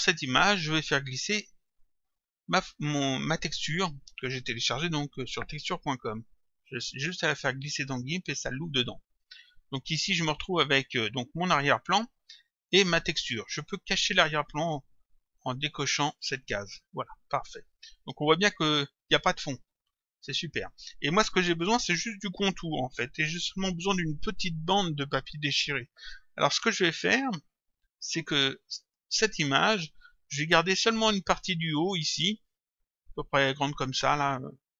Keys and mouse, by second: 1.7 click, 5.5 click, 10.2 click, 11.6 click, 16.2 click, 17.6 click, 28.1 click.